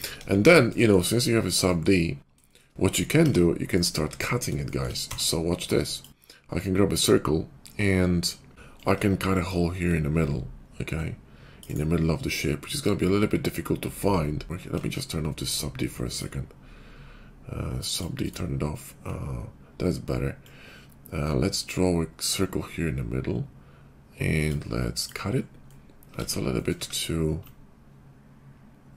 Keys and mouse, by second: 0.1 KP_5, 3.7 d, 4.0 alt+w, 5.1 d, 8.8-11.6 ctrl+drag, 14.8 ctrl+`, 25.3-28.9 drag, 26.1 ctrl+z.